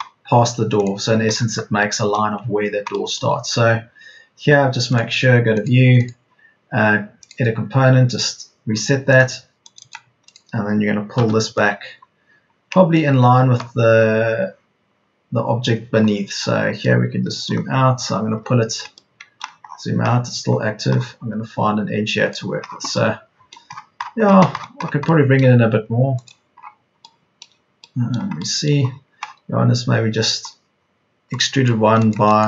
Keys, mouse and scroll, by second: 8.6 Escape, 11.1 p, 24.3 p.